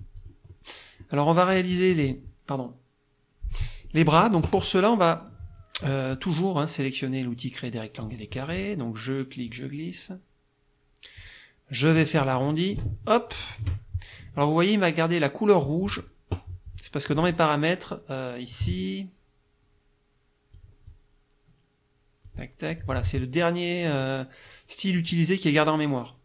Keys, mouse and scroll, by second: 1.6 click, 8.1 click, 9.5-11.4 drag, 12.8-13.9 drag, 17.1 click, 18.5 click, 20.6 click, 22.3 click.